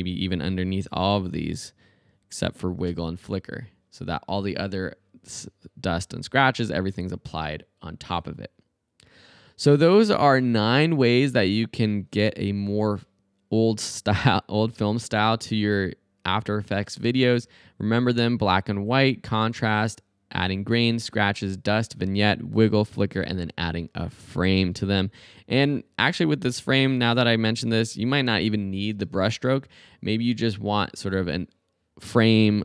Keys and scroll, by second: 2.9 space.